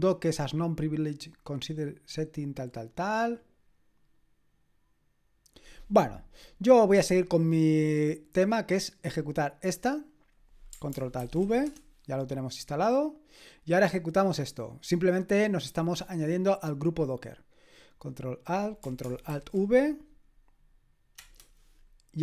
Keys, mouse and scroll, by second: 1.1-2.5 scroll down 1, 2.5-7.9 scroll down 1, 7.9 click, 9.6 click, 10.3 click, 11.2 ctrl+alt+v, 11.7 Return, 15.2-19.5 drag, 17.0 middle click, 17.0 right click, 19.3 ctrl+alt+v, 21.1 Return.